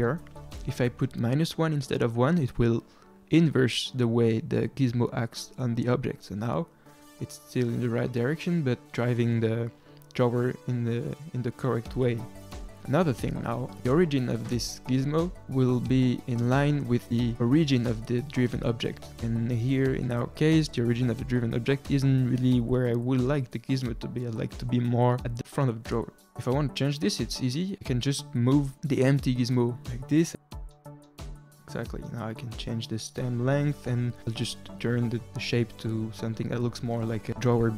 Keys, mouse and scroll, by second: 0.2-3.2 drag, 6.3 click, 11.4-11.8 scroll up 2, 11.8-13.1 middle drag, 14.9 click, 17.4-19.8 middle drag, 19.8 click, 20.3-22.7 middle drag, 22.7 click, 23.3-24.2 middle drag, 24.2-26.2 scroll up 1, 27.4-31.9 drag, 31.9-32.9 middle drag, 32.9-37.4 drag, 37.4-37.7 middle drag.